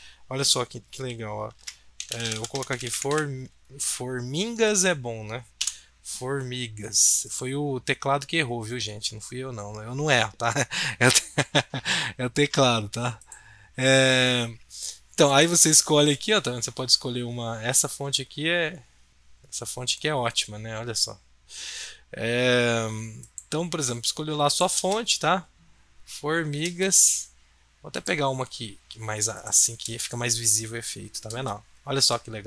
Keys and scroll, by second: 1.5 Caps_Lock, 1.7-3.6 typing, 5.6 BackSpace.